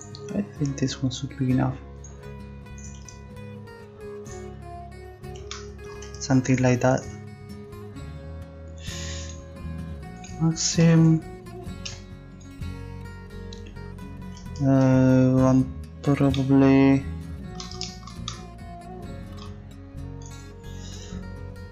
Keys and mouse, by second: 11.0 a, 19.0-20.2 middle drag, 20.2-21.7 right drag.